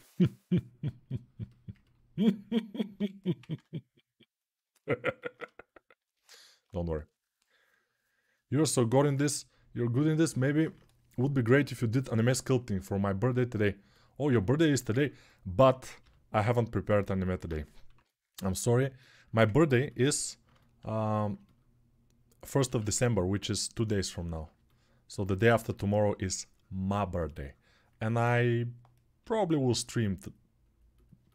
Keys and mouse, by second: 2.7 g, 3.2-5.0 drag, 3.2 ], 3.3 ], 5.1-27.7 alt+shift+drag, 15.8 g, 17.7 6, 22.4 1, 25.9 3, 29.0 g.